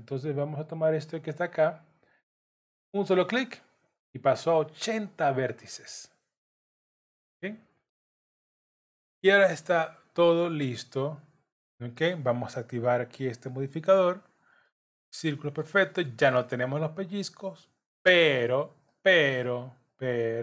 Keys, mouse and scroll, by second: 3.1 click, 5.2 middle click, 9.2 Tab, 9.7 middle click, 10.4-11.2 scroll up 6, 11.6 middle click, 14.1 click, 14.6 middle click, 17.3-17.8 scroll down 1, 18.4 scroll down 1, 18.9 middle click.